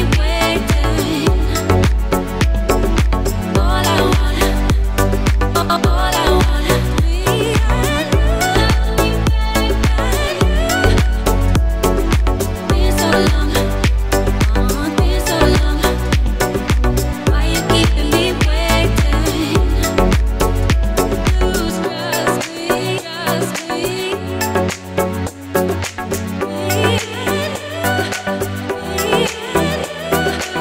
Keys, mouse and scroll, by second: 0.8 alt+scroll down 2, 1.0-1.5 alt+scroll up 2, 1.7 click, 3.2-3.6 alt+scroll down 2, 3.7-4.1 alt+scroll up 2, 4.1 alt+scroll down 1, 4.4-5.2 alt+scroll up 2, 5.6 click, 8.2 alt+scroll down 1, 8.4 alt+scroll up 1, 8.6 alt+scroll down 1, 8.7 alt+scroll up 1, 9.0 click, 9.8 scroll down 1, 10.0 click, 10.8 scroll down 1, 10.9 right click, 11.1 click, 13.1 alt+scroll down 1, 13.3-13.6 alt+scroll up 2, 13.8 alt+right click, 14.8 alt+scroll down 1, 14.9 alt+scroll up 1, 15.0 alt+right click, 15.4 click, 16.5 alt+scroll down 1, 16.9 alt+scroll up 2, 17.3 ctrl+z, 17.7 ctrl+z, 18.0 alt+scroll up 2, 18.1 alt+right click, 18.3 click, 19.1-19.7 scroll down 4, 19.7-20.1 alt+scroll up 4, 22.5 alt+Num_Lock, 23.0 alt+click, 25.8 click, 26.2-26.7 alt+scroll up 2, 26.7 click.